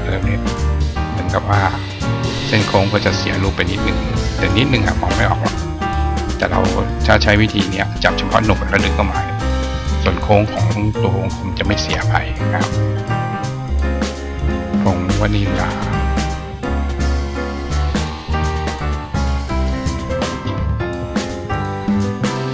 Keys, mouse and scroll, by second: 1.8 click, 5.0 click, 6.6 click, 7.3-7.9 drag, 9.3-11.6 drag, 12.5 click, 12.8 click, 13.4-14.7 drag, 15.1 click, 17.4-18.6 drag, 19.4 click, 22.3-22.5 drag.